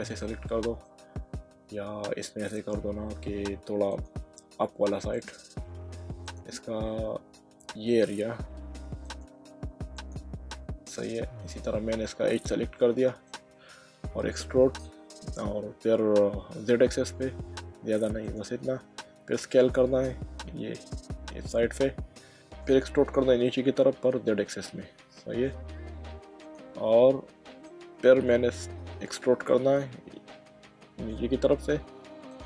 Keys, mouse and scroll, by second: 0.2 middle click, 2.2 middle click, 3.9 click, 5.1 click, 6.2 click, 7.7 middle click, 9.0 click, 10.0 alt+click, 10.5 middle click, 11.7 middle click, 12.9 middle click, 14.1 e, 16.7 z, 18.2 click, 19.0-19.7 typing, 21.6 click, 24.3 z, 26.4 click, 26.9 middle click, 29.7 e, 31.4 z, 32.3 click.